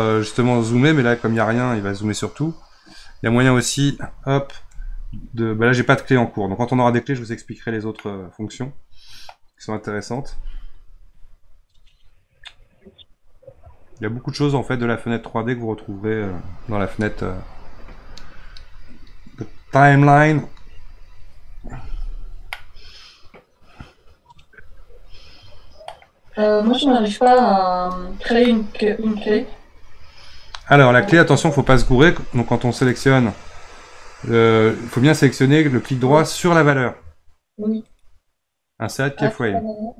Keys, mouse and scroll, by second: 2.5-3.7 scroll down 14, 4.7 f, 5.7-7.1 scroll up 16, 7.5-7.9 scroll down 2, 7.9-11.1 middle drag, 15.2-16.3 scroll down 1, 22.5-27.2 middle drag, 27.2 click, 28.4-31.5 middle drag, 32.7 click, 33.5-36.7 scroll down 6, 37.8-39.9 right drag.